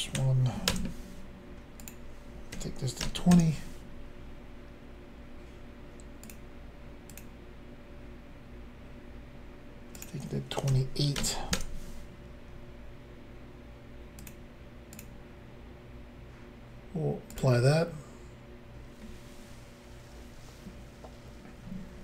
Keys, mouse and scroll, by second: 0.1 1, 0.7 Return, 1.8 click, 2.5-3.0 typing, 3.3 Return, 6.2 click, 7.1 click, 7.2 click, 9.9 click, 10.0 click, 10.7-11.2 typing, 11.5 Return, 14.2 click, 14.3 click, 15.0 click, 17.3 click, 17.4 click.